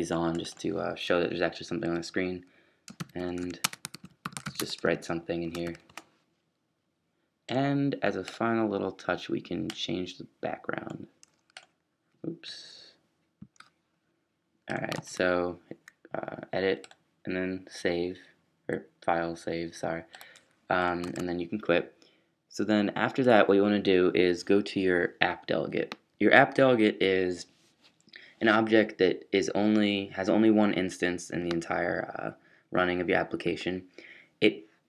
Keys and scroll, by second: 3.0-5.7 typing, 14.9 super+s.